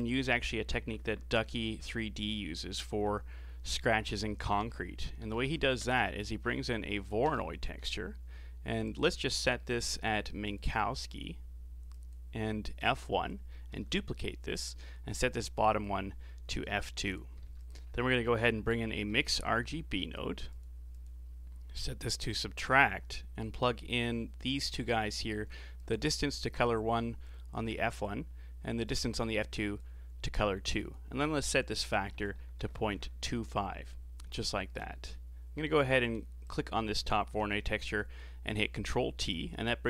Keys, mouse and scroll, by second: 5.9 BackSpace, 9.3 scroll up 5, 9.6-10.5 middle drag, 10.5-13.8 drag, 13.8 shift+d, 15.2-16.2 drag, 16.2-17.4 middle drag, 17.4 shift+a, 20.9-23.9 drag, 25.8 click, 27.2 click, 28.9 click, 30.8-33.8 drag, 34.4 scroll down 3, 34.9 middle click, 35.8 click, 36.9-37.5 middle drag, 37.5 ctrl+t, 37.9-39.7 middle drag, 39.7 click.